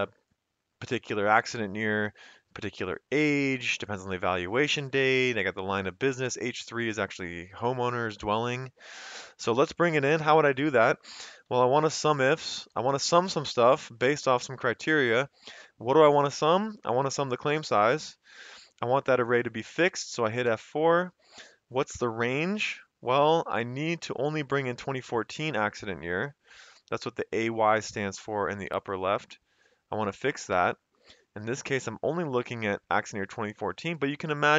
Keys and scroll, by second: 11.1-13.3 typing, 18.0 F4, 20.4 typing, 27.4 F4, 30.5 typing.